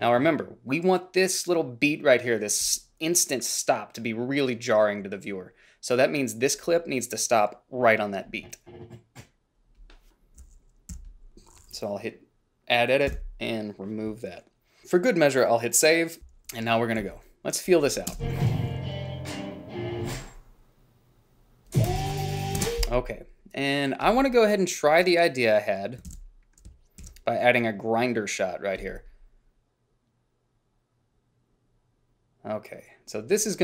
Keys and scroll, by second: 11.0 g, 13.2 Delete, 15.1 ctrl+s, 16.3 h, 17.1 a, 18.3 space, 22.7 space, 26.2 ctrl+b, 27.2 shift+x.